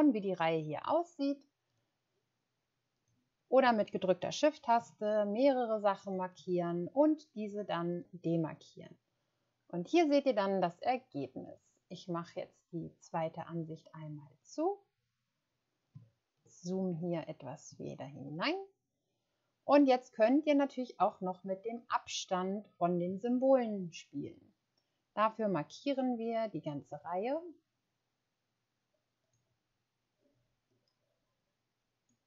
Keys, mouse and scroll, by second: 16.0 ctrl+scroll up 1, 16.5 scroll up 1, 18.5-18.9 ctrl+scroll up 1.